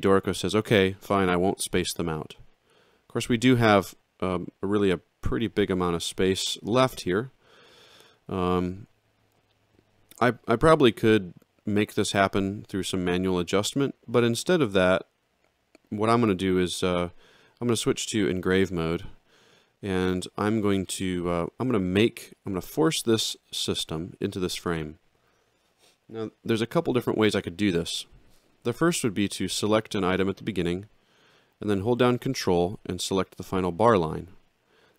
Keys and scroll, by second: 18.1 ctrl+3.